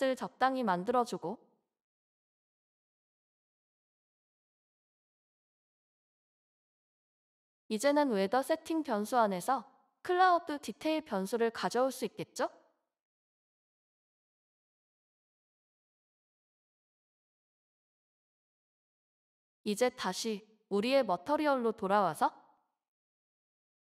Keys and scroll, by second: 0.0 ctrl+s, 2.1-2.9 typing, 3.9 ctrl+s, 6.2 Left, 6.8 ctrl+BackSpace, 7.2 ctrl+BackSpace, 7.5 g, 8.5 Return, 9.9-11.1 typing, 14.4 Down, 14.4 typing, 14.6 Down, 14.8 Down, 14.9 Down, 16.3 Return.